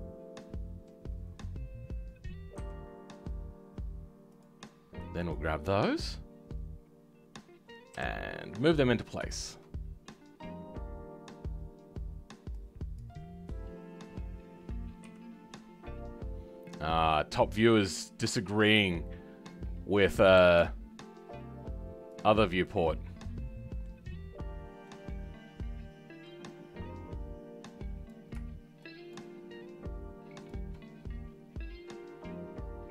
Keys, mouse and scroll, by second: 7.9 KP_7, 8.3-9.3 scroll down 2, 9.3-12.5 shift+middle drag, 12.5-15.0 drag, 15.0 g, 18.5-20.4 scroll up 4, 20.4 g, 22.3 scroll down 4, 22.6-24.0 middle drag, 24.0-24.7 scroll up 2, 24.7 scroll up 3, 24.8-28.0 middle drag, 28.0 click.